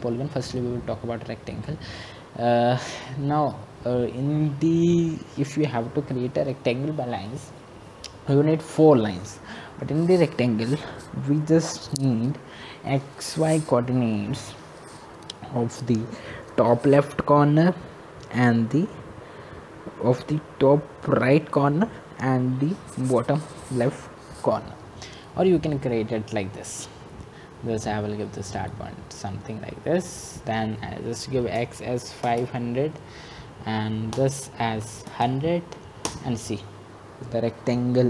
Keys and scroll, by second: 36.3 typing.